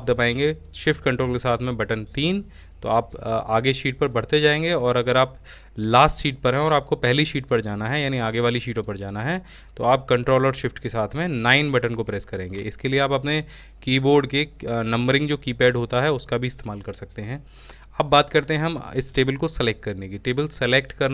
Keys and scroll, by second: 0.0-1.0 typing, 7.4-8.3 typing.